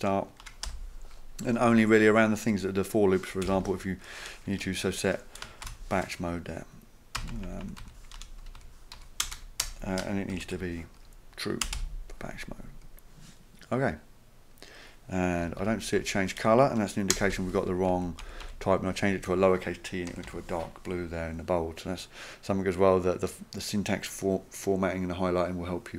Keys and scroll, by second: 0.4 Return, 0.7 typing, 3.2-4.0 typing, 5.6 shift+b, 7.2 Down, 7.3 Down, 7.5 Down, 7.6 Down, 7.8 Down, 8.2 Return, 8.6 Left, 9.0 Left, 9.3-12.3 typing, 15.4 Left, 15.6 Left, 16.0 Left, 17.1 BackSpace, 17.3 t, 17.9 Right, 18.2 Right, 18.4 Right, 20.1 Right, 20.3 Right.